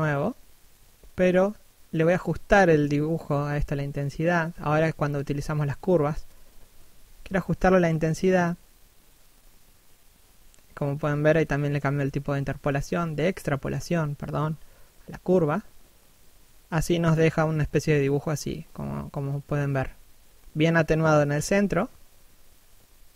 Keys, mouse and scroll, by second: 16.1 f, 16.9 right click, 17.9 f, 18.7 right click, 19.2-19.7 scroll up 1, 19.7 click, 21.3 shift+f, 21.9 click.